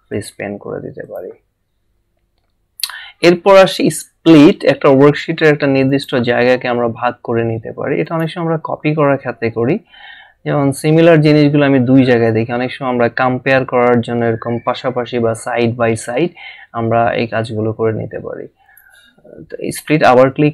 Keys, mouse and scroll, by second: 0.1 click, 5.9 click, 8.2 click, 14.1 scroll down 1, 15.0 scroll up 1, 18.6 click.